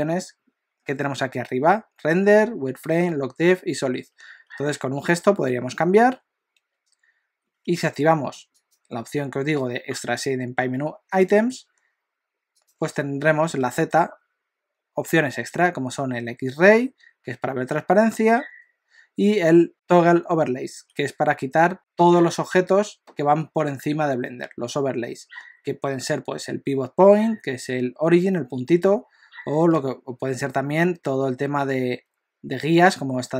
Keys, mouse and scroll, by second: 4.5-6.6 typing, 8.0 F4, 13.6 z, 29.8 z.